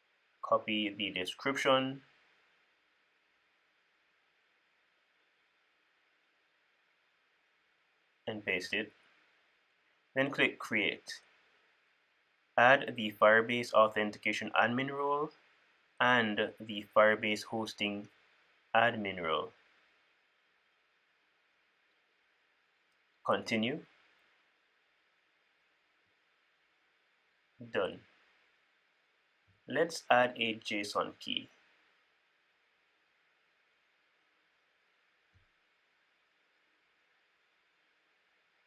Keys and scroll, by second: 2.4 super+c, 8.3 super+v.